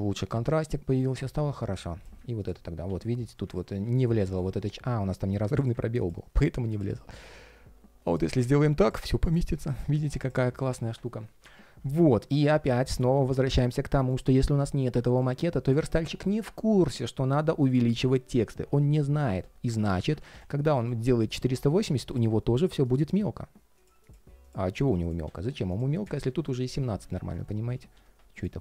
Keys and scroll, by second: 19.6 super+z, 21.4 super+v, 27.0 super+z, 27.4 super+z.